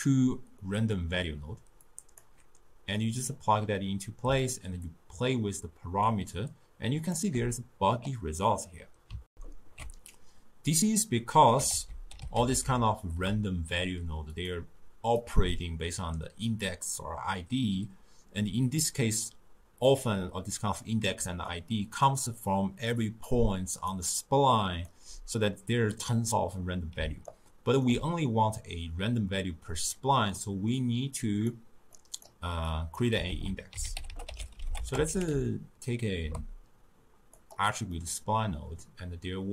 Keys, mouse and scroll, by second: 0.7-1.9 middle drag, 1.9-7.5 drag, 9.3 ctrl+alt+shift+q, 11.7 ctrl+a, 15.2-18.2 drag, 21.2-25.0 typing, 21.5 click, 22.4 click, 23.3 click, 24.3 click, 27.0 d, 27.3 right click, 27.9 d, 30.4-31.2 middle drag, 31.2 click, 32.0 click, 32.7 click, 33.3 ctrl+a, 34.1 t, 38.0-39.5 middle drag.